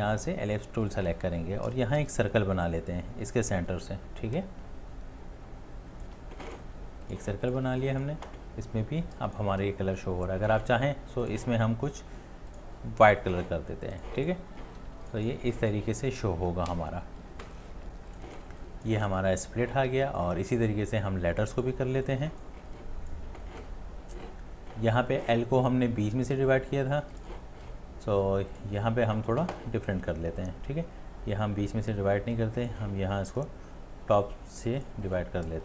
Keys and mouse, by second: 4.1 space, 4.3 alt+click, 4.5-6.0 shift+click, 4.7 shift+click, 4.8 shift+click, 4.8 shift+click, 7.6 space, 14.8 space, 15.7 space, 18.4 space, 18.9 space, 19.9 space, 21.3 space, 22.7 space, 22.8 click.